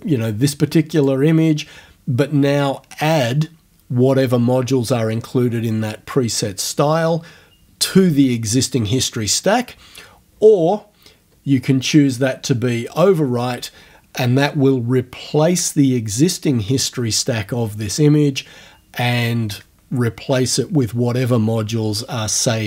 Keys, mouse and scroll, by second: 1.0 click, 11.5 scroll down 2.